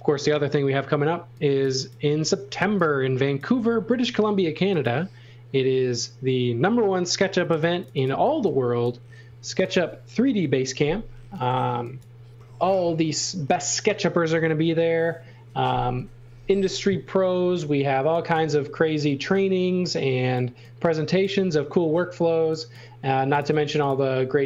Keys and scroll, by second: 2.6 e, 4.0 a, 8.2 e, 9.5 space, 10.4 Delete, 11.7 x, 12.0 v, 18.0 x, 18.5 v, 19.0 e, 23.1 space, 23.6 f.